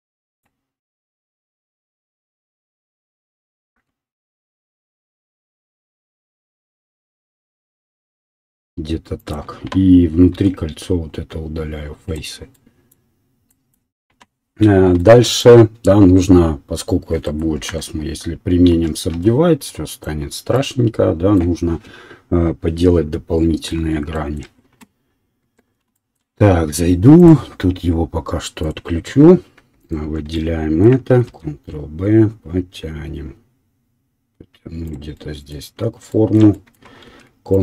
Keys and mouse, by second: 0.8 e, 1.5 s, 5.1-6.8 middle drag, 5.2 e, 8.5 s, 8.6 right click, 9.3-29.8 middle drag, 10.5 x, 17.6 Tab, 19.1 ctrl+3, 25.4 Tab, 29.8 alt+click, 29.9-37.6 alt+middle drag, 31.2 ctrl+b, 34.7 ctrl+r.